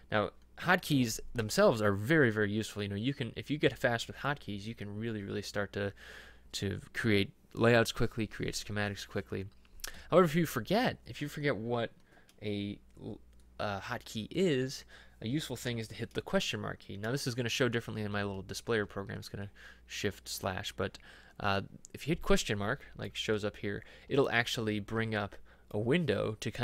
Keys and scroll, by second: 10.0 Escape, 18.9 shift+/.